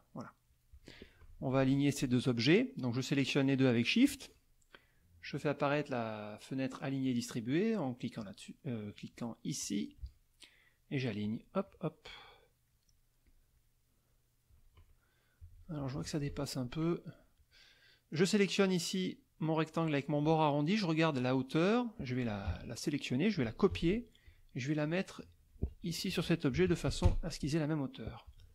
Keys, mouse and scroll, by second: 0.2 middle click, 1.3 F1, 2.1 shift+click, 5.7 click, 8.2-9.3 drag, 9.6 click, 11.2 click, 11.7 click, 12.7 middle click, 13.3 click, 13.5 middle click, 14.2 click, 15.4 z, 15.6 click, 16.3 F1, 16.6 click, 17.4 click, 21.7 click, 22.5 ctrl+a, 23.7 ctrl+c, 24.2 ctrl+click, 25.3 ctrl+click, 25.7 ctrl+a, 26.5 ctrl+v, 27.0 ctrl+Return.